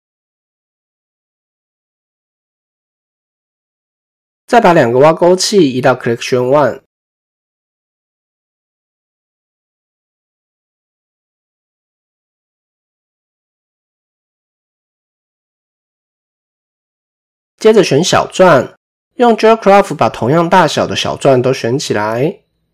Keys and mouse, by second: 1.6 ctrl+j, 6.0-8.0 drag, 11.9 x, 14.4 click, 14.8 click, 18.6 click, 19.2-20.2 drag.